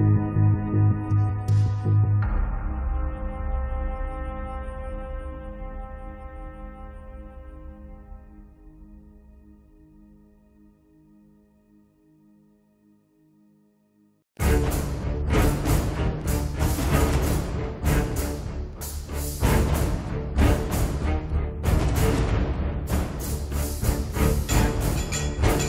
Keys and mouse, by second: 0.7 middle click, 1.5 middle click, 1.7 click, 2.6 middle click, 2.8 f, 3.2-4.9 drag, 3.4 ctrl+z, 4.7 middle click, 4.7 right click, 4.9 middle click, 5.1-11.5 drag, 5.1 right click, 7.4-8.7 right drag, 8.9 1, 11.5-12.8 middle drag, 12.8 click, 13.4 middle click, 13.8 ctrl+s, 14.3 middle click, 15.2 right click, 15.3 middle click, 15.4 click, 15.4 right click, 15.7 middle click, 16.1-17.3 drag, 17.3 middle click, 17.5 click, 17.5 f, 18.5 shift+f, 19.1 click, 20.3 middle click, 20.6 click, 21.3 KP_3, 21.9 click, 22.9 KP_1, 23.2 middle click, 23.3 click, 23.7 KP_Divide, 24.3-25.6 drag.